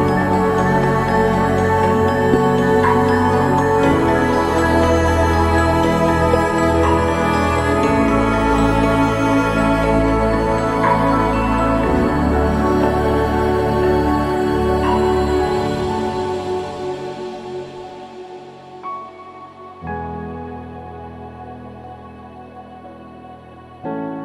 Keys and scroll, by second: 6.9 ctrl+-, 7.0 ctrl+=, 19.2 ctrl+-, 20.7 ctrl+=.